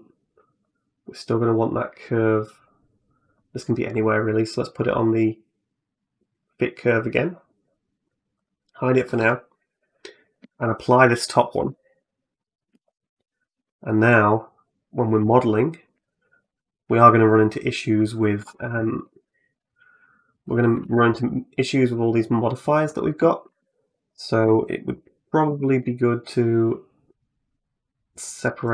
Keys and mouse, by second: 0.4-3.4 drag, 5.1-6.3 drag, 8.2 click, 8.9 middle click, 9.4 middle click, 10.0 click, 11.4 ctrl+a, 12.2 middle click, 12.6 shift+middle click, 13.2 right click, 13.4 Tab, 13.7 middle click, 15.1 shift+middle click, 17.1 right click, 18.2 2, 18.9 ctrl+r, 20.6 Tab, 23.3 Tab, 23.9 right click, 25.3 shift+d.